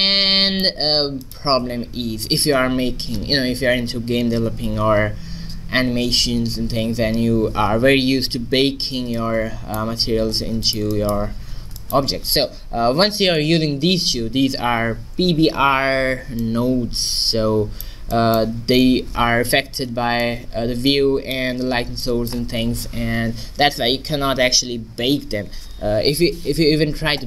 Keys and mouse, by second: 1.2-3.1 drag, 1.6 x, 6.5-12.9 middle drag, 10.2 a, 16.5-18.2 drag, 18.2-20.9 middle drag.